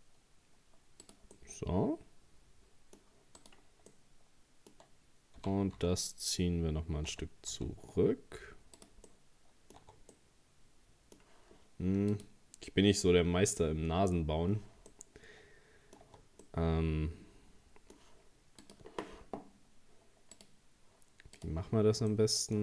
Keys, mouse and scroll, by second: 1.4-3.4 middle drag, 3.4 right click, 3.9-5.4 middle drag, 5.4 g, 9.1 middle click, 9.8 Tab, 10.1-13.2 middle drag, 14.9-16.0 middle drag, 16.0 Tab, 16.4-19.5 middle drag, 22.1-22.6 middle drag.